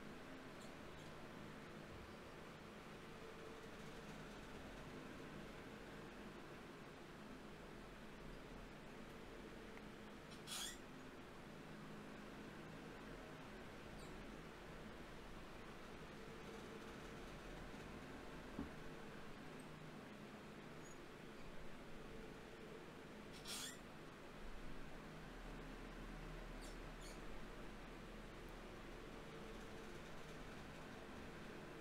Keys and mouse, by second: 3.8 f, 7.8-14.5 middle drag, 14.6-16.5 middle drag, 16.1 t, 26.8-29.9 middle drag.